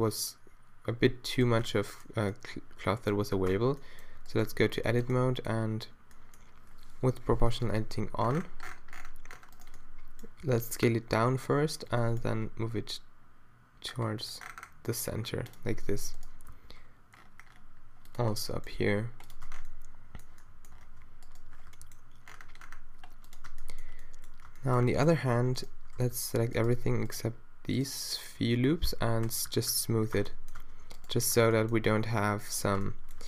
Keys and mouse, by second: 3.6 Tab, 4.3-6.7 middle drag, 7.2 o, 7.8 s, 10.5 s, 11.9-13.6 drag, 11.9 g, 16.5 s, 18.3 g, 19.5 Tab, 20.9 Tab, 21.7 g, 23.3 click, 23.5 Tab, 24.5 Tab, 25.6-27.2 drag, 26.0 a, 26.1 a, 28.9 q, 29.3-29.7 q, 30.2 Tab, 30.6 Tab, 31.5 g, 32.8 click.